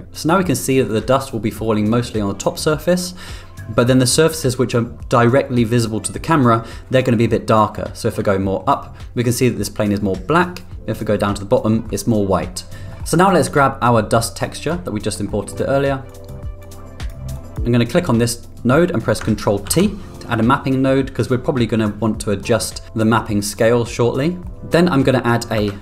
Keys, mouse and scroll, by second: 7.8 middle click, 10.4-11.7 middle drag, 12.9 middle click, 14.0 middle click, 14.7 click, 15.4 middle click, 16.1 click, 16.6 click, 17.4 click, 19.9 ctrl+t, 20.1 middle click, 25.7 shift+a.